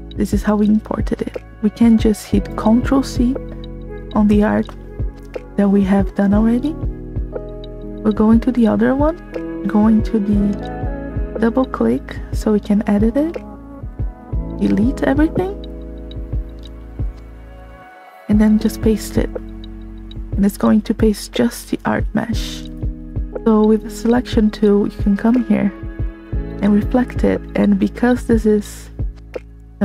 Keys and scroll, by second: 7.9 c, 14.9 b, 22.6 v.